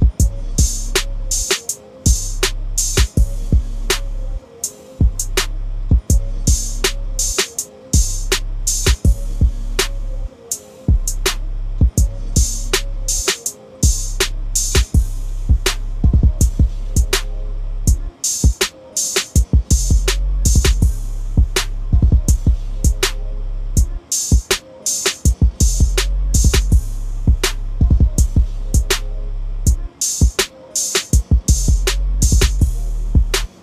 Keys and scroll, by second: 1.6 ctrl+d, 21.3-23.7 typing, 26.6 ctrl+s.